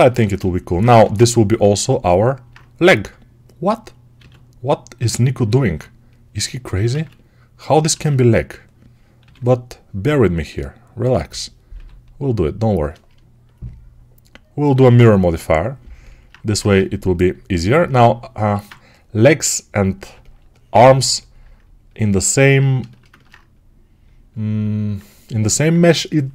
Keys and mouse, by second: 0.9 shift+d, 3.9-5.3 drag, 4.0 s, 5.3-6.7 alt+middle drag, 6.7-14.6 ctrl+drag, 6.8 ctrl+z, 7.9 ctrl+z, 9.1 g, 16.4 ctrl+Tab, 17.6-20.0 alt+shift+right drag, 18.4 alt+q, 22.8-24.5 ctrl+alt+shift+right drag, 24.5-26.3 alt+drag.